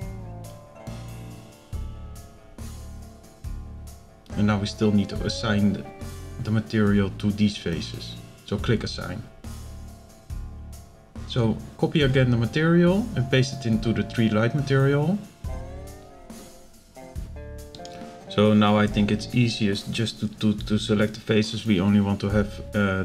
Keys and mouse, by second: 5.5 click, 9.9-10.4 drag, 10.9 click, 11.6-12.3 drag, 12.9 click, 14.4 drag, 20.4 click, 22.0 alt+shift+click.